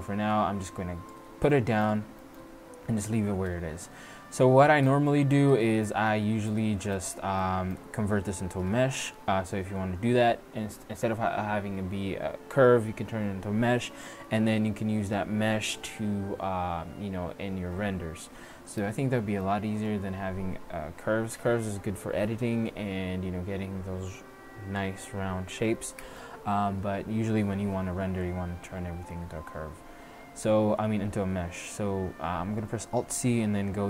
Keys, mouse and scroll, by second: 1.6 middle drag, 2.8-3.3 middle drag, 3.5 Tab, 5.7 middle click, 5.9 Tab, 26.7 middle click, 30.2 alt+c.